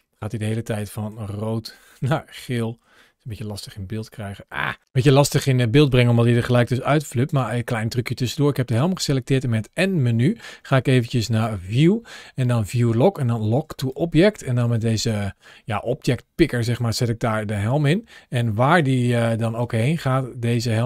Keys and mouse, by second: 0.1 click, 2.3-2.6 middle drag, 3.3 shift+middle click, 4.4 shift+middle click, 8.5 n, 9.2 n, 10.3 ctrl+shift+a, 18.6 click, 19.5 space.